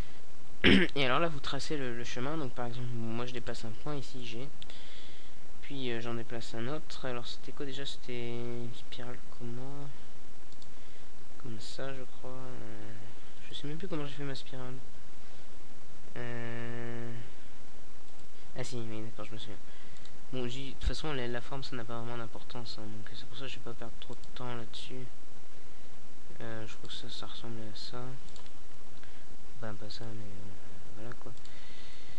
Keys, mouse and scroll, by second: 2.4 g, 6.9-8.3 drag, 7.8 e, 9.7 click, 10.7 ctrl+z, 15.4 g, 16.8-17.9 drag, 17.5 e, 20.7 e, 23.0 e, 24.6 click, 25.1 click, 26.7 r, 28.3 r, 29.5-30.7 middle drag, 30.7 right click, 31.4 r.